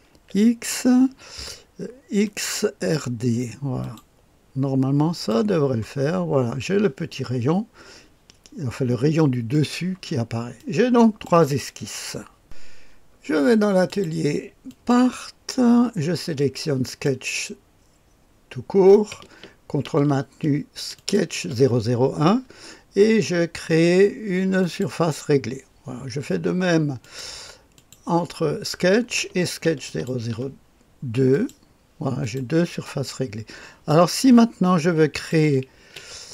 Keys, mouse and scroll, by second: 0.0 x, 2.2 click, 3.7 click, 5.0 click, 9.4 click, 10.5 click, 13.8 click, 14.6 click, 16.8 click, 20.9-24.8 ctrl+drag, 26.9 click, 27.7 click, 29.8 ctrl+click, 31.2 click, 32.1 click, 32.8-33.8 drag, 35.1 click, 35.7 space.